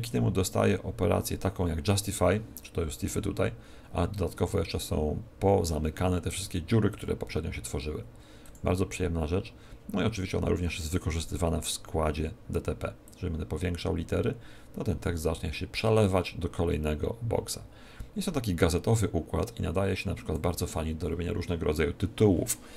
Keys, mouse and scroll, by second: 6.8 click, 8.4 click, 13.0 click.